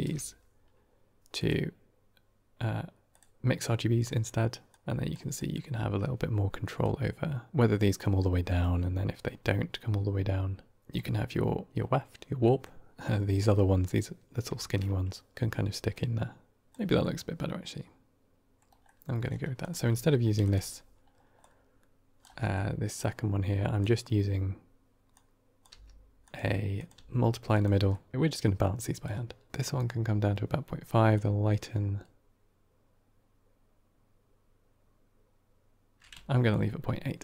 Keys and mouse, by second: 4.6 click, 5.3 middle drag, 6.7-7.5 drag, 7.9 middle click, 8.4 middle click, 10.8 click, 12.3 middle drag, 13.3 middle click, 14.5 shift+middle drag, 15.8 click, 16.9-18.5 middle drag, 18.7 middle click, 19.5 click, 19.6 d, 20.3 click, 20.4 x, 21.3-22.1 drag, 22.3 middle click, 22.9-23.7 drag, 25.0-25.5 drag, 25.6 g, 26.6 click, 26.8 g, 27.8 middle click, 28.1 x, 28.9 shift+click, 29.4 middle click, 29.5 middle click, 31.0-36.4 drag.